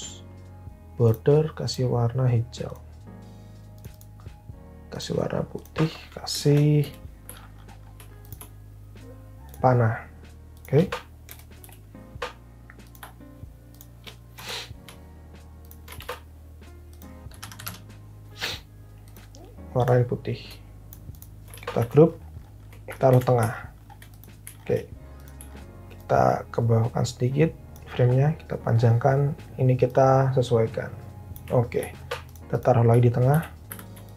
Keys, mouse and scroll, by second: 2.4 click, 6.8 p, 11.2 Return, 11.6 p, 14.4 Return, 16.0 ctrl+g, 17.0-18.0 typing, 21.7 ctrl+g, 23.1 alt+h, 33.3 alt+v, 33.7 alt+h.